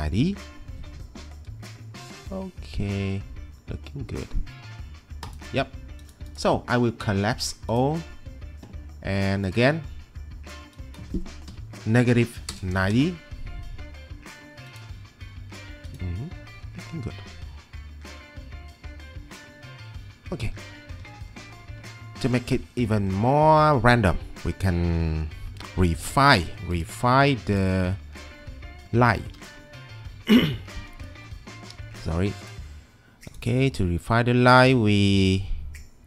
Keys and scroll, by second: 11.3-12.5 typing, 12.9 Return, 29.3 1.